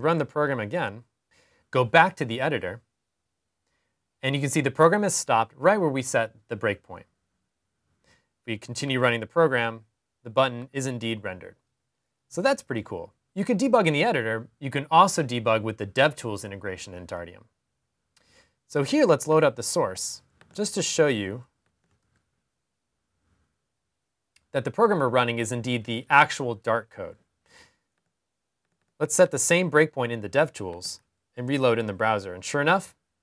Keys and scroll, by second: 21.4 super+r, 30.5 super+r.